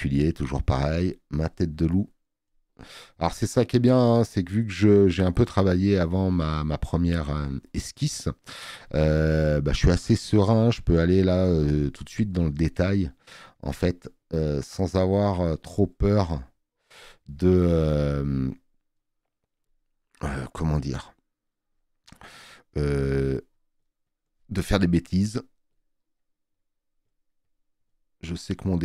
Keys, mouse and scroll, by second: 7.8 space, 8.0 click, 21.6 alt+middle click.